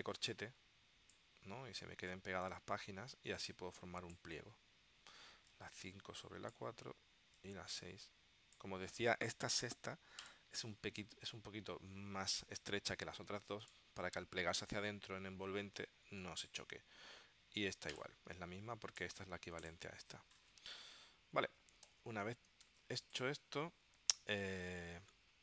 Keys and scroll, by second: 21.9 v, 22.7 space.